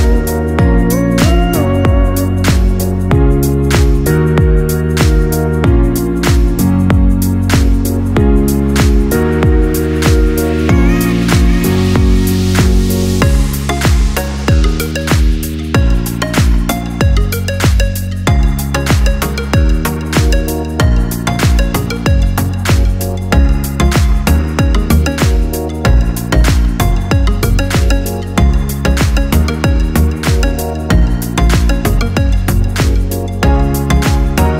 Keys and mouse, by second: 3.4-7.9 middle drag, 7.9 click, 8.2 click, 9.5 f, 10.6-19.4 middle drag, 19.4 click, 20.4 Tab, 22.5-25.5 ctrl+middle drag, 25.5 click, 26.7 Tab, 28.7 click, 29.3 click, 30.8 click, 31.5 click, 32.5 click, 32.7 click, 33.7-34.5 middle drag.